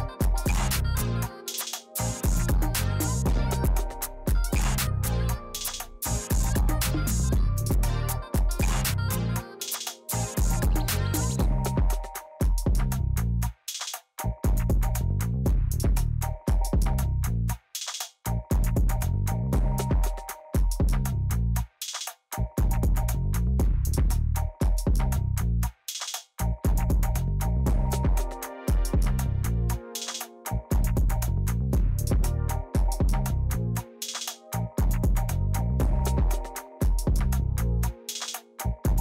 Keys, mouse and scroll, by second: 36.7 middle click, 37.1 middle click, 37.7 middle click, 37.9 middle click, 38.4 middle click, 38.8 middle click.